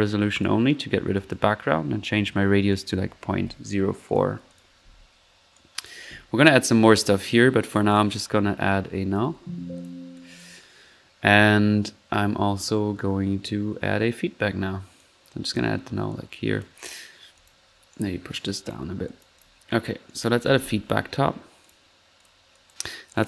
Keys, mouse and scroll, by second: 0.3 click, 1.1-1.5 drag, 2.7 click, 5.5-6.0 drag, 6.2 click, 6.4-6.8 middle drag, 7.9 click, 8.9-9.7 typing, 9.8 alt+drag, 10.1-10.6 alt+drag, 14.9 click, 16.1 click, 17.3-19.0 drag, 17.9-18.6 right drag, 19.0 click, 19.2-19.6 drag, 20.0 right click, 20.1-21.1 typing, 21.6 click, 22.2 drag, 22.5 drag, 23.1 click.